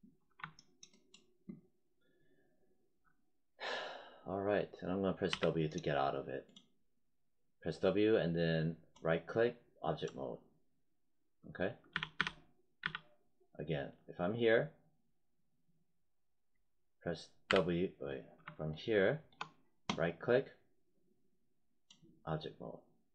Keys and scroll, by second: 5.2 w, 11.8 z, 17.4 w.